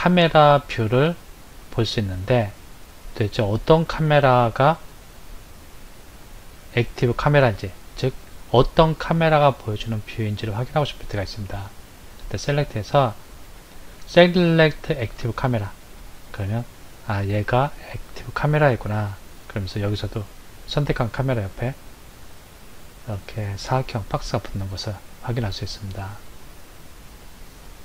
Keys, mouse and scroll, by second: 2.3 KP_0, 4.0 click, 11.2 click, 25.1 click, 27.3 click.